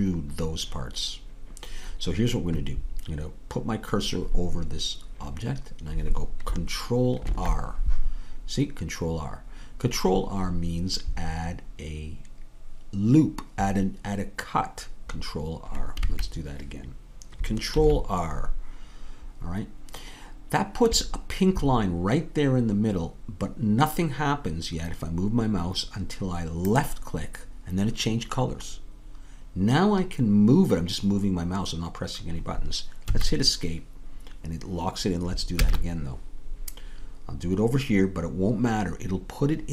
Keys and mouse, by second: 7.3 ctrl+r, 17.7 ctrl+r, 35.6 ctrl+z.